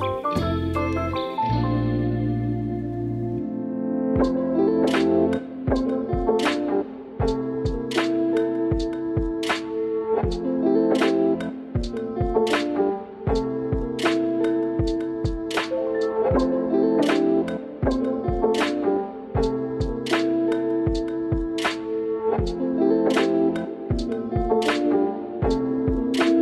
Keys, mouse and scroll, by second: 0.0 click, 0.8 shift+click, 4.2-6.0 middle drag, 6.1 Tab, 6.4 alt+z, 6.6-10.1 middle drag, 11.0 ctrl+KP_1, 12.2 ctrl+KP_7, 12.8 click, 12.9 Tab, 15.6 shift+v, 15.9 shift+click, 16.2 click, 16.7 shift+click, 16.7 shift+v, 18.4 click, 20.5 click, 21.7 KP_1, 22.1 alt+z.